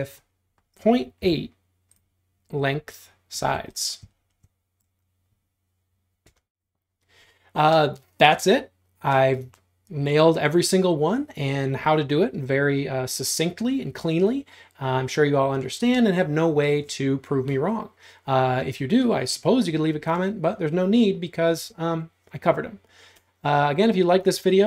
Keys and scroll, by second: 1.3 t, 3.4 space.